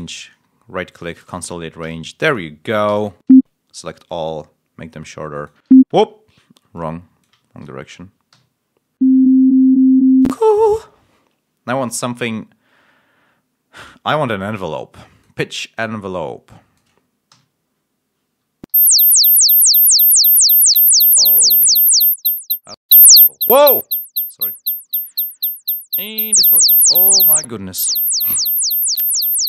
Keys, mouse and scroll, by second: 0.8 click, 1.7 g, 2.2 click, 2.8 e, 3.2 ctrl+a, 4.0-5.6 alt+drag, 5.6 ctrl+alt+y, 5.8 scroll up 2, 6.6 alt+middle click, 7.6 ctrl+alt+scroll down 3, 8.2 ctrl+l, 9.0 middle click, 10.1 space, 10.6 click, 11.6 click, 14.3 click, 14.9 click, 15.7 click, 16.4 click, 17.2 l, 18.6 l, 26.1 click, 26.6 click, 27.2-28.9 drag, 29.1 space.